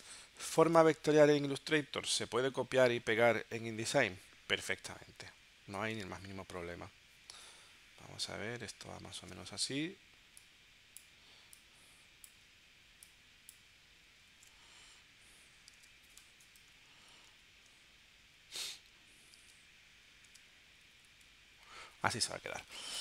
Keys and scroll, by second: 6.1 super+Tab, 9.8 super+Tab, 14.4 super+Tab, 15.8 super+Tab, 17.3 shift+Down, 19.4 super+Tab, 20.3 super+Tab, 20.7 Right.